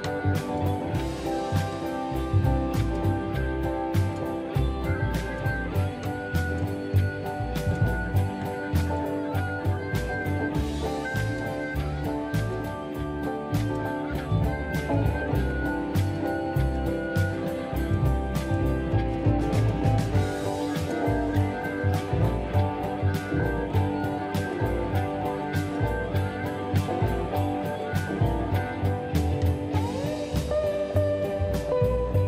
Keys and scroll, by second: 4.6 /, 4.9 Return, 5.6 space, 8.7 m, 10.9 space, 11.9 m, 14.0 Return, 14.3 space, 15.3 m, 16.4 space, 21.9 space, 23.3 space, 27.4 m, 28.5 space, 29.2 m.